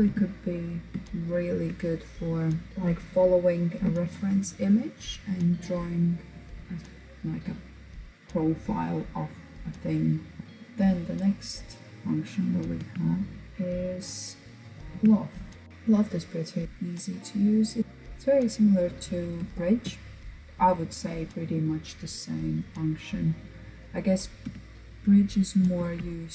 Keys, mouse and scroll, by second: 0.7-2.7 shift+middle drag, 10.4 click, 11.8 Tab, 14.0 Tab, 14.7 click, 16.2 click, 16.6 middle click, 17.2-17.8 scroll down 2, 17.8-21.8 middle drag, 23.5 KP_1, 24.8 alt+z, 25.2-26.0 scroll up 1, 26.0 click.